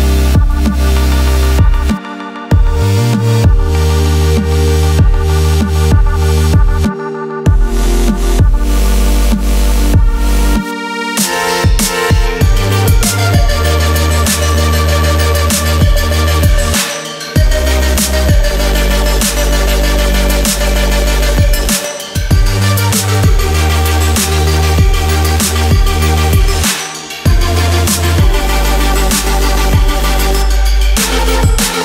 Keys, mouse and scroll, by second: 0.0 click, 5.9 ctrl+z, 7.4 click, 8.4-9.2 alt+scroll down 2, 9.4 alt+scroll up 1, 10.5 click, 12.4 BackSpace, 13.4 click, 15.5 alt+scroll down 1, 15.9 alt+scroll up 1, 16.4-17.0 scroll down 3, 17.0 scroll up 1, 17.7 scroll down 1, 18.7 click, 23.3 click, 30.1 scroll down 1, 31.0 click.